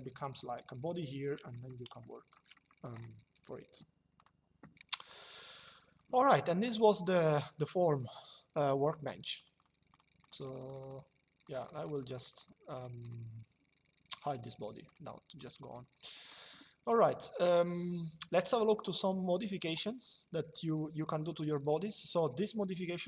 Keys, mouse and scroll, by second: 1.2 middle click, 1.7 middle click, 3.9 click, 7.6 click, 14.6 click, 15.8 middle click, 18.1 click.